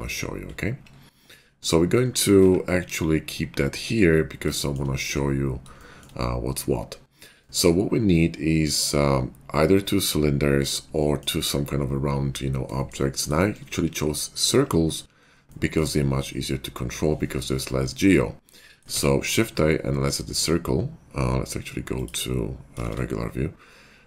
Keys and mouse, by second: 0.2-4.6 drag, 2.9 KP_5, 4.7-16.0 shift+drag, 18.9 shift+a, 21.9 click, 21.9 middle click, 21.9 right click, 22.8 shift+a, 23.0-24.0 drag.